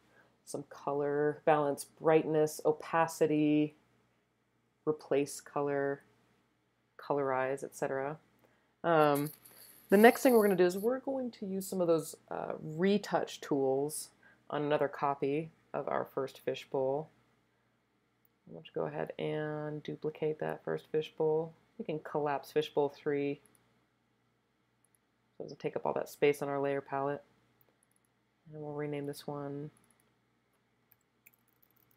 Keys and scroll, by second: 30.9 Right, 31.3 BackSpace, 31.4 BackSpace, 31.6 BackSpace, 31.8 Delete.